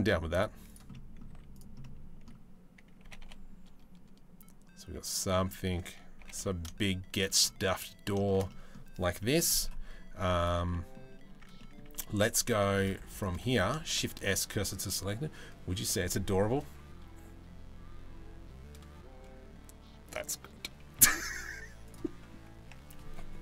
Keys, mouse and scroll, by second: 0.5-0.8 middle drag, 0.9 z, 1.4-1.9 middle drag, 2.7 g, 5.8 g, 7.2 middle click, 7.9 shift+middle click, 8.1 middle click, 8.8 middle click, 10.0 right click, 10.3-11.4 middle drag, 10.9 Tab, 11.6 Tab, 13.5 shift+s, 20.5 shift+a.